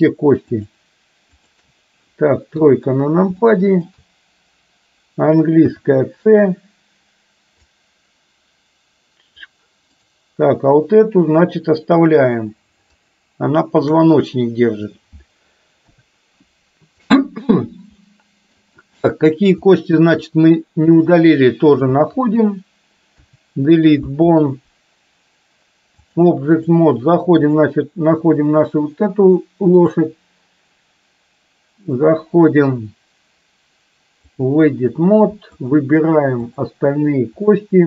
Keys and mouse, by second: 1.5 shift+click, 2.7 KP_3, 3.6 shift+middle click, 5.7 c, 13.2 shift+click, 15.8 Delete, 18.1 middle click, 19.6 shift+middle click, 21.0 click, 23.2 Delete, 26.2 click, 30.0-34.6 drag, 35.7 shift+click, 37.5 shift+click.